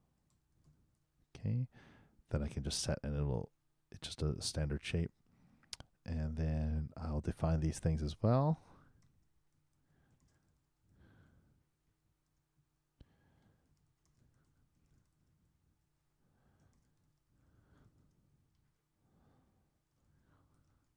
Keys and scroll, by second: 6.0 shift+9, 9.9-11.8 typing, 14.7 shift+n, 16.5-17.8 typing.